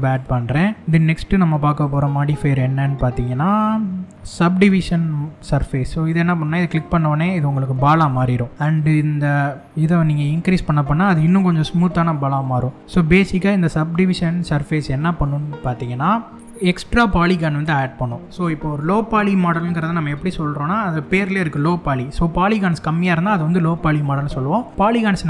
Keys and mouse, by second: 1.4-6.4 drag, 7.4-7.7 drag, 9.6-15.4 drag.